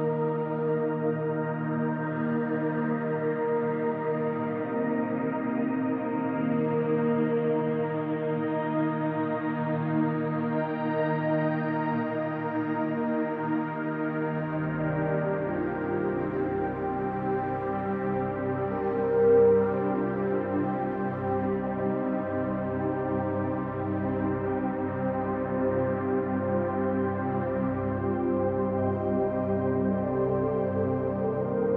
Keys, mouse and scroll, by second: 0.1 click, 1.8 e, 2.4 right click, 3.0 click, 5.4 scroll down 1, 5.7-9.9 middle drag, 6.5 a, 6.6-7.2 scroll down 2, 7.6-8.0 scroll down 2, 8.2-9.5 scroll up 2, 9.5-9.9 scroll up 1, 9.9-17.6 drag, 17.3-17.6 scroll up 1, 17.6-19.2 middle drag, 17.8 scroll up 1, 19.2 click, 20.1-22.2 middle drag, 22.2 click, 23.0 KP_Decimal, 23.4 scroll down 1, 23.6-26.0 middle drag, 24.5 x, 26.0 click, 26.3 middle click, 26.8 click, 27.0 scroll down 1, 27.2-29.5 middle drag, 27.6 scroll down 1, 28.8 scroll down 1, 29.5-30.7 ctrl+drag, 30.7 KP_3, 31.5 KP_1.